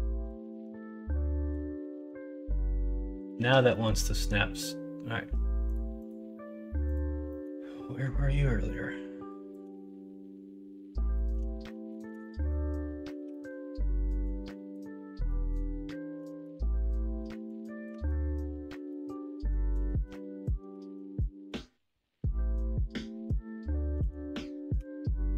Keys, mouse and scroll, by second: 0.5 alt+z, 1.9 g, 3.3 ctrl+z, 3.7 middle click, 6.4-7.4 drag, 7.4 middle click, 9.5-11.1 drag, 11.1 middle click, 11.6 shift+middle click, 12.2-13.5 middle drag, 15.2 scroll up 1, 15.5 scroll down 1, 16.3 shift+Tab, 17.9 alt+z, 18.2 scroll up 1, 18.9 middle click, 19.8 ctrl+z, 20.8 alt+z, 23.9 ctrl+i, 24.7 x.